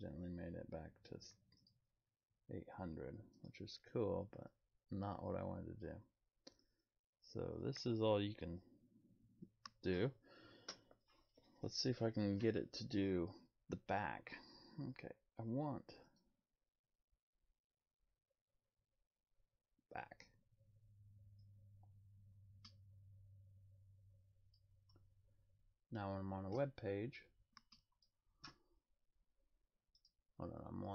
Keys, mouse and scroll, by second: 1.6 click, 3.3 right click, 5.8 click, 16.0 click, 21.4 click, 29.9 click.